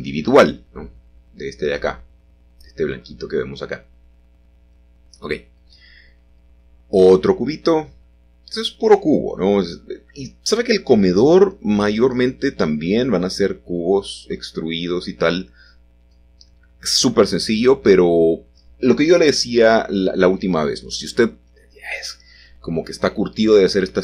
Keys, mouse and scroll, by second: 1.2-1.7 scroll up 1, 4.9 shift+a, 5.6 click, 6.6 g, 7.2 shift+z, 10.3 click, 13.8 s, 14.0 z, 15.8 click, 16.5 s, 19.6 click, 20.6-21.3 typing.